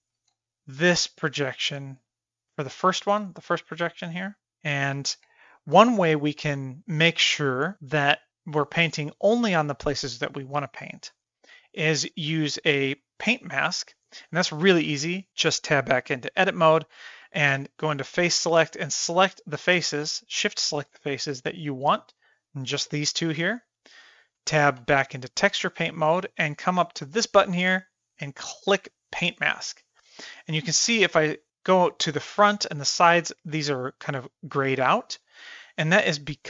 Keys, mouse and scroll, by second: 0.3 x, 0.9-2.8 drag, 6.6-13.3 middle drag, 6.6 f, 13.6 shift+middle click, 14.1 shift+middle click, 14.4 middle click, 15.1 middle drag, 15.2-15.7 middle drag, 16.1 Tab, 17.5 3, 18.3 click, 19.0 middle click, 20.6 shift+click, 23.3-24.5 middle drag, 24.8 Tab, 29.1 click, 30.2-33.3 middle drag, 35.2-35.9 middle drag, 36.3 shift+middle click.